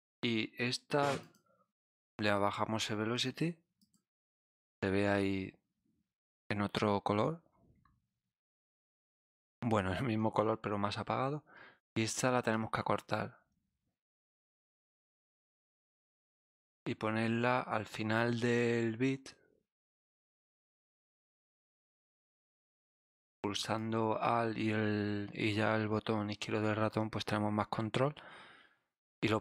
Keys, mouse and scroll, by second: 0.9 click, 1.2 click, 2.3 click, 3.7 click, 8.9 click, 12.0 alt+Num_Lock, 12.5-15.0 alt+drag, 16.1-17.0 scroll up 5, 18.5-20.3 alt+drag, 21.4 ctrl+click, 22.8 right click, 23.7-29.0 alt+drag.